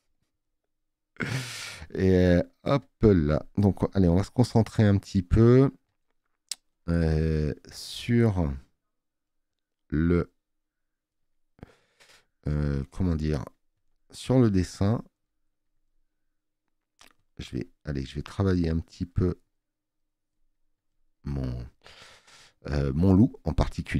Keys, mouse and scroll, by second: 17.2 space, 17.3 click.